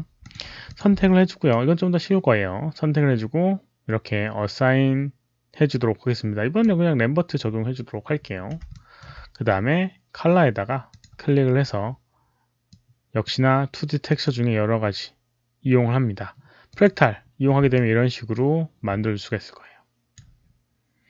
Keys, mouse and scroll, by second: 0.1 alt+click, 0.6 alt+click, 1.5-7.7 alt+right drag, 8.0 click, 8.0 alt+middle click, 8.6 alt+middle click, 10.8 click, 10.8 alt+middle click, 10.8 right click, 12.3 alt+middle click, 12.6 click, 12.8 alt+middle click, 14.0 click, 16.6 click, 16.6 alt+middle click, 17.6-20.0 alt+drag.